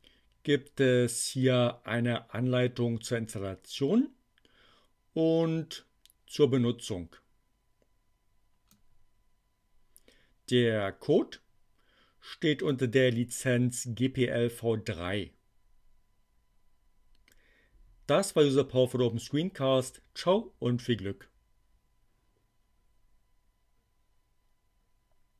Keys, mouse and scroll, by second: 10.4-12.8 drag.